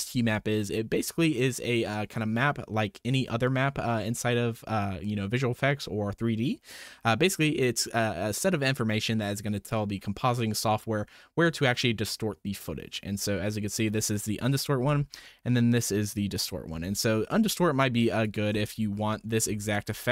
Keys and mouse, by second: 16.0 ctrl+shift+click, 18.1 ctrl+shift+click, 19.1 click, 19.6 ctrl+shift+click.